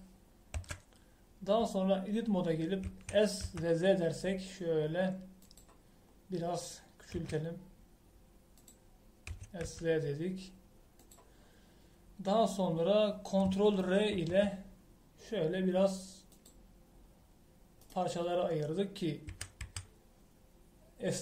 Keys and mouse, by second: 1.5 Tab, 3.8 s, 7.0 middle click, 8.1 s, 10.2 s, 12.4 click, 15.1 ctrl+r, 20.3 a, 20.6 a.